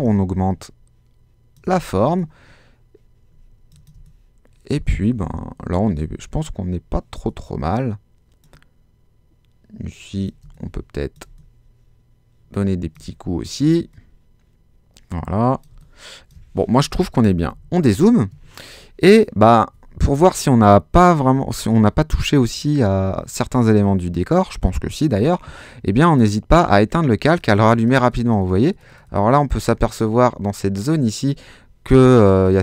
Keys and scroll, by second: 3.9 space, 10.4 space, 13.0 space, 15.7 space, 17.2 super+-.